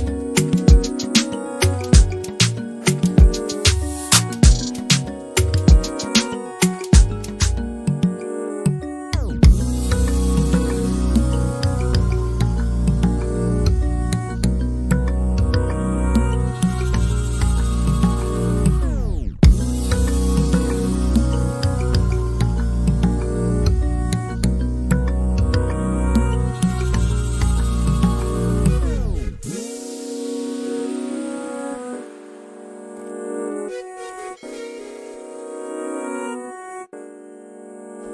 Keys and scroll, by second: 3.0 m, 5.1-6.4 typing, 12.2-13.7 typing, 19.3 r, 22.1 m, 26.6 |, 28.4 m, 34.0 /, 35.4-36.4 typing, 38.0-38.1 typing.